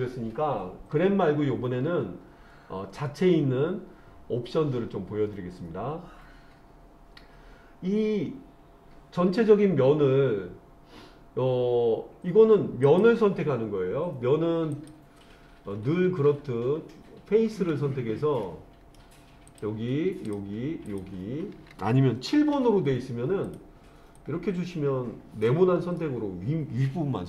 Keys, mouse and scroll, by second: 12.9 click, 14.8 click, 17.7 click, 18.5 middle click, 19.5 click, 20.3 shift+click, 20.9 shift+click, 22.6 KP_7, 23.5 click, 24.2-25.5 drag, 26.0-27.2 middle drag.